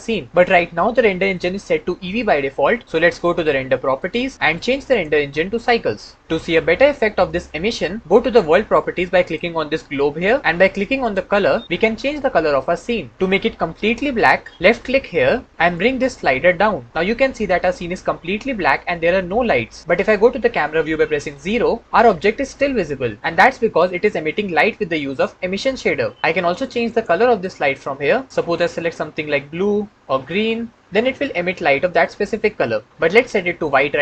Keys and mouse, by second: 3.9 click, 4.3 ctrl+z, 4.7-5.6 drag, 21.2 KP_0, 26.8 click.